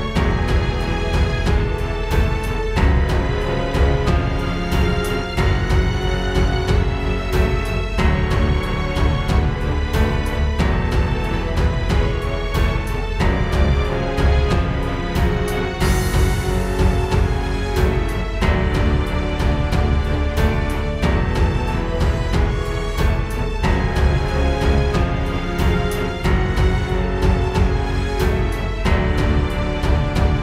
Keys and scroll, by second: 0.6 super+space, 1.2 alt+super+space, 5.6 space, 7.6 space, 8.1 alt+super+space, 8.6 super+space, 15.7 super+[, 19.1 super+g, 24.6 super+z.